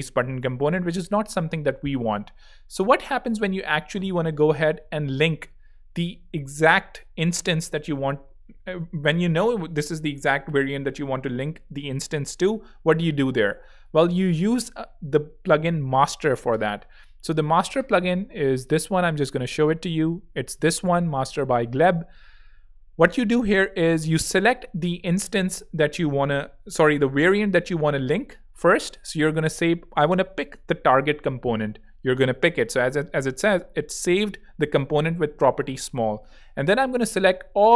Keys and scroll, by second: 0.8 super+z.